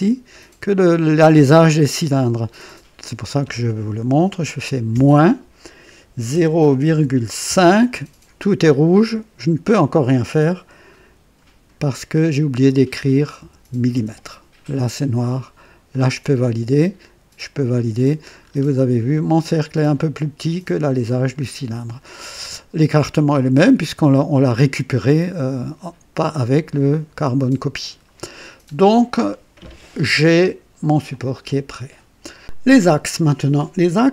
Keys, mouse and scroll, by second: 4.8 KP_Subtract, 6.2 KP_0, 6.8 ,, 7.4 KP_5, 13.3-13.8 typing, 15.8 click, 17.3 click, 18.4-18.7 scroll up 1, 21.3-21.7 scroll down 1, 28.4-28.8 scroll down 2, 31.0 click.